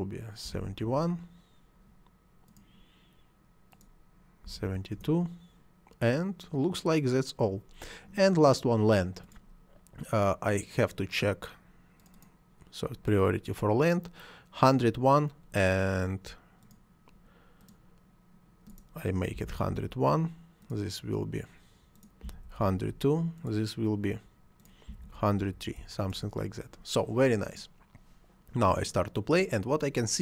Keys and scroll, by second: 0.5 7, 0.8 Return, 4.4 7, 4.7 2, 4.9 Return, 19.4 1, 19.5 0, 19.8 1, 22.3 1, 22.6 2, 24.9 1, 25.0 0, 26.1 Return.